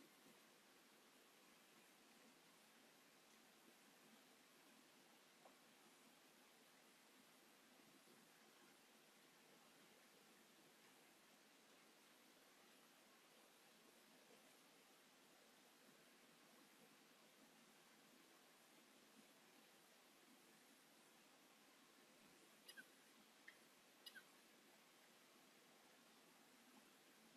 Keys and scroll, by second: 0.5 ctrl+g, 1.1 m, 1.7 space, 2.2 q, 3.2 Return, 3.7 m, 6.6 space, 10.7 space, 10.7 Escape, 16.7 space, 16.8 Escape, 18.6 q, 19.2 m, 21.6 q, 22.7 9, 23.2 Return, 24.0 m, 26.7 s.